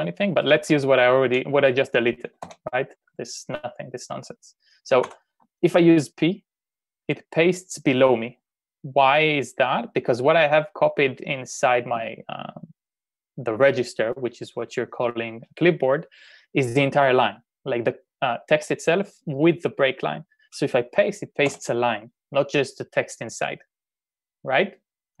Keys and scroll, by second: 2.4 p, 5.0 u, 21.5 p.